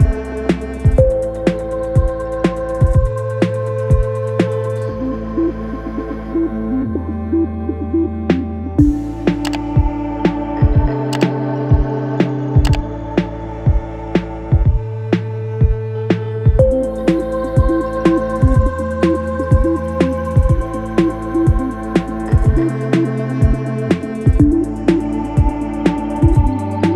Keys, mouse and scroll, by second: 15.7 click, 19.6 right click, 20.9 click, 25.3 shift+click.